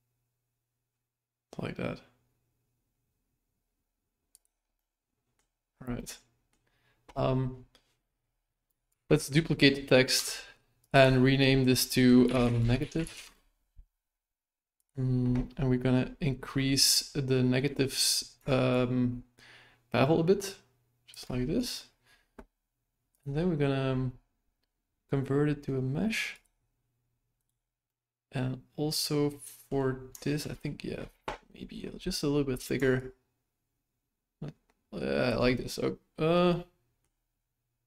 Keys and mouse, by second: 4.7-5.3 middle drag, 5.9-6.5 middle drag, 8.9 shift+d, 10.9-13.7 drag, 14.7 click, 18.7-21.1 shift+drag, 23.1-26.4 drag, 27.3 right click, 27.9-29.7 middle drag, 30.2 shift+middle drag, 33.0-35.3 shift+drag, 36.5 middle click.